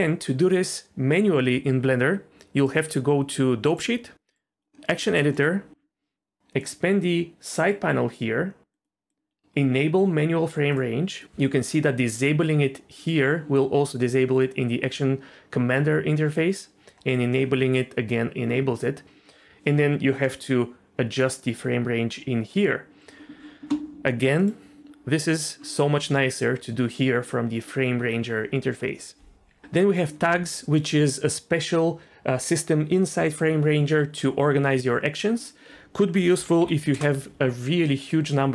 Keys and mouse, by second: 3.7-4.9 drag, 5.2 middle click, 6.6 click, 8.6 click, 8.8-13.1 drag, 17.1-23.4 drag, 24.5 click, 35.4-37.0 drag.